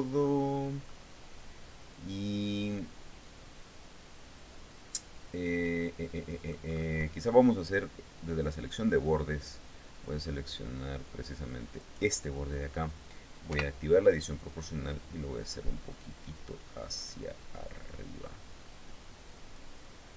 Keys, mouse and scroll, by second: 0.4-6.3 middle drag, 8.1 click, 11.3 right click, 13.0 o, 13.9-14.9 drag, 14.9-16.1 scroll up 6, 16.9 scroll down 2, 20.0 Tab.